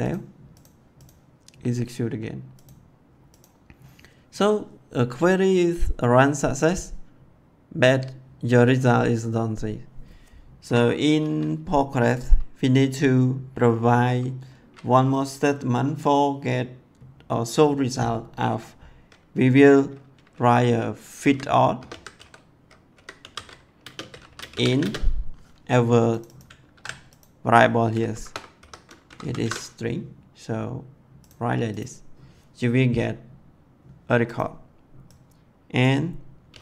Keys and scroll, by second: 10.5 Return, 21.1-25.0 typing, 26.6 ctrl+c, 28.0 shift+', 28.4 ;, 28.9 Left, 29.2 ctrl+v, 36.3 2.